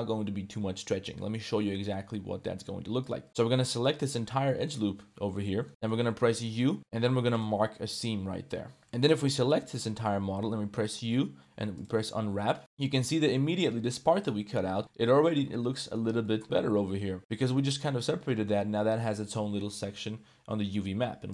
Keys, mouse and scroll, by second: 3.0 click, 3.4 1, 3.9 alt+click, 5.3 middle click, 5.7 middle click, 6.3 u, 8.8 z, 9.2 a, 9.4 z, 9.8 middle click, 10.0 click, 10.7 u, 12.6 Tab, 12.6-13.3 drag, 13.4 shift+drag, 13.9 Tab, 14.3 click, 14.8 Tab, 14.8 middle click, 15.7 middle drag, 16.2-17.2 middle drag, 17.3 Tab, 17.3 middle click, 18.3 middle click, 18.6 Tab, 18.7-19.1 middle drag.